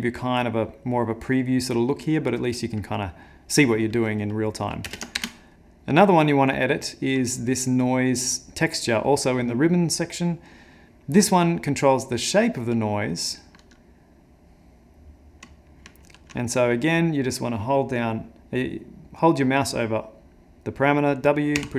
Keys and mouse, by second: 4.9 space, 5.2 Left, 5.5 middle click, 6.2 middle click, 7.4 click, 8.8 click, 9.3 middle click, 11.8 click, 16.1 ctrl+z.